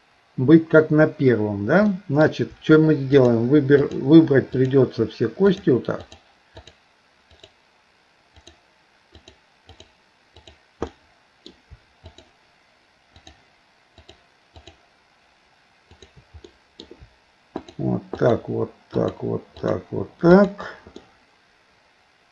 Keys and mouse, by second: 1.9 middle click, 3.2 shift+click, 3.9 shift+click, 4.5 shift+click, 6.0 shift+click, 6.6 shift+click, 7.3 shift+click, 9.2 shift+click, 9.7 shift+click, 10.9 middle click, 12.1 shift+click, 14.1 shift+click, 14.6 shift+click, 15.9 shift+click, 16.5 middle click, 17.6 shift+click, 18.2 shift+click, 18.9 shift+click, 19.6 shift+click, 21.0-22.3 middle drag.